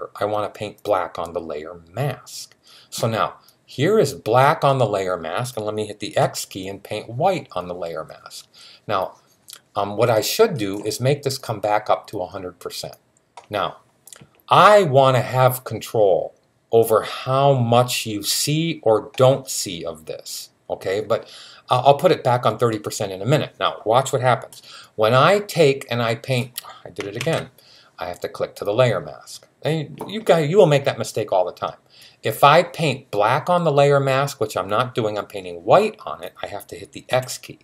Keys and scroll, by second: 6.0 x, 27.0 super+z, 36.9 x.